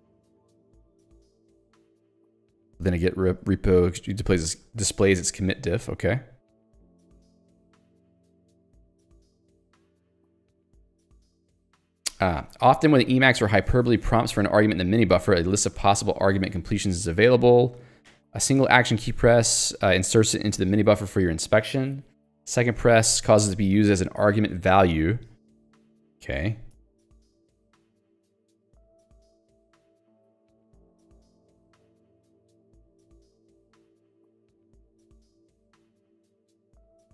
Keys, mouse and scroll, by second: 3.6 k, 5.2 j, 7.9 ctrl+d, 12.2 k, 25.7 Escape, 26.3 ctrl+d, 26.8 Escape, 27.4 j, 29.6 ctrl+d, 33.0 ctrl+u, 34.4 ctrl+d.